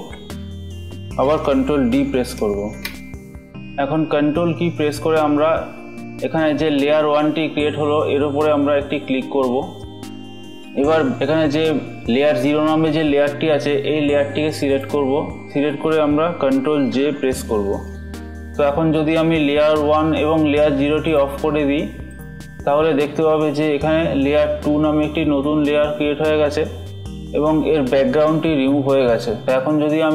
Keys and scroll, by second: 1.9 ctrl+d, 8.0 ctrl+Left, 16.4 ctrl+j.